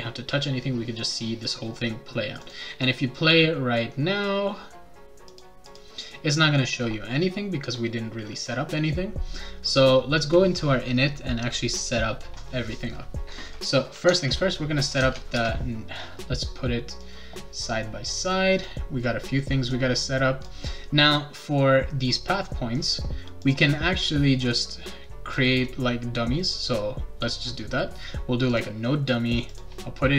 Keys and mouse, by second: 2.4 click, 5.3 click, 5.7 click, 14.0 \, 15.0 BackSpace, 15.3 Return, 17.0-18.6 drag, 19.7 click, 23.4 click, 26.4 right click, 28.5 click, 29.5 click.